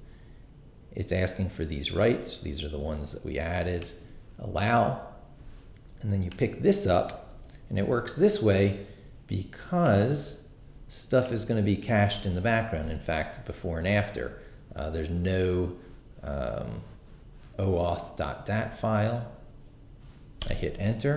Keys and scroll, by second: 7.3 super+c, 12.0 super+v, 20.4 Return.